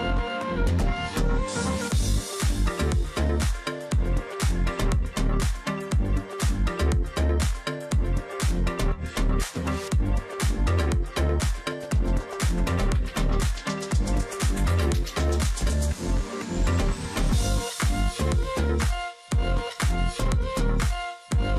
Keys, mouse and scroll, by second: 1.6 ctrl+click, 2.3 alt+scroll up 1, 2.5-2.8 alt+scroll down 1, 2.8 alt+click, 3.7 alt+scroll down 1, 4.5 alt+scroll up 1, 5.1 ctrl+click, 5.8 alt+click, 7.1 alt+click, 7.4-7.8 alt+scroll down 1, 7.8 space, 9.2 space, 9.6-10.1 alt+scroll up 1, 11.8 double click, 14.2 alt+click, 14.9 double click, 17.7 double click, 18.1 alt+click, 18.8 double click, 20.6 alt+click, 20.9 alt+scroll down 1, 21.2 space.